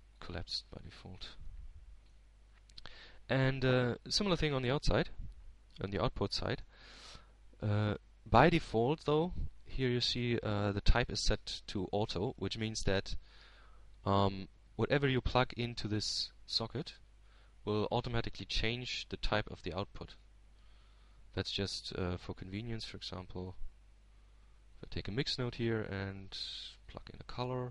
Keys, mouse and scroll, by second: 2.2 h, 3.2-4.2 drag, 4.3-6.2 middle drag, 6.4-6.8 scroll down 2, 7.7-8.9 drag, 9.4 h, 10.3-12.6 middle drag, 12.6-13.2 scroll up 2, 13.2-13.6 scroll up 1, 16.5 middle click, 17.4-17.9 scroll down 1, 19.7-21.6 drag, 23.3 click, 24.1 shift+a.